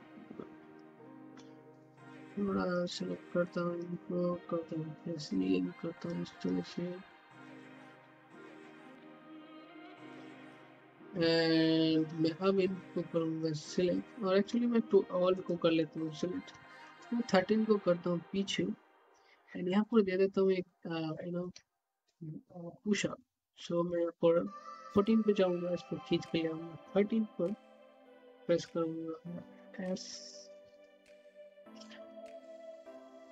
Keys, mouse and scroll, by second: 1.5 typing, 2.1-4.8 drag, 4.8 e, 5.4-15.3 drag, 15.3 click, 17.1-19.7 middle drag, 19.7 click, 22.1 middle click, 23.0 click, 25.6-30.1 middle drag, 30.1-30.6 typing, 31.3 click, 32.6 typing.